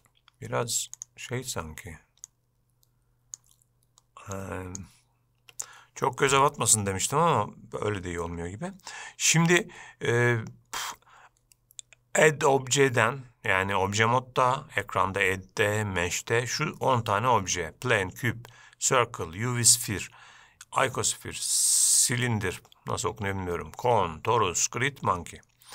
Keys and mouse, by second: 0.0 n, 1.1 click, 5.6 n, 11.1-25.7 drag.